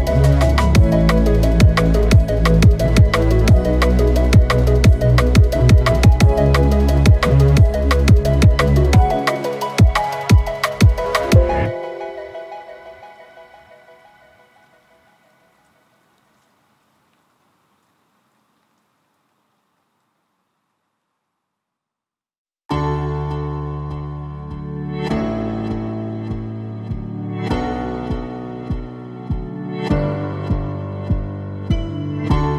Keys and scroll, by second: 14.3 ctrl+z, 14.7 ctrl+z, 16.7 ], 23.7 ctrl+z, 28.8 ctrl+z, 31.0 F6.